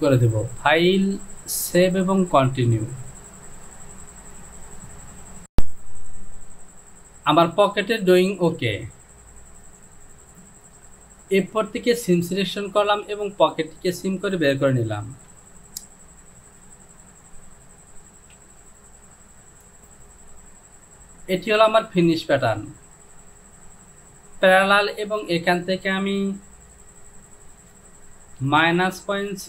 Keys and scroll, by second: 15.4 j, 18.2 Home, 27.6 Down, 28.4 KP_Subtract, 29.0 KP_Decimal.